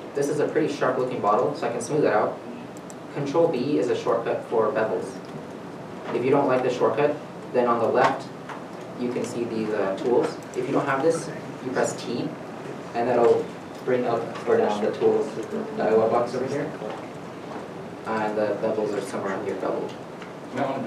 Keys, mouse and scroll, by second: 0.3-1.5 scroll down 1, 3.7 ctrl+b, 6.6 ctrl+b, 6.6 right click, 9.4 right click, 9.5-11.7 scroll down 1, 12.7 t, 14.5 t, 17.6 t, 17.7-18.0 scroll down 1.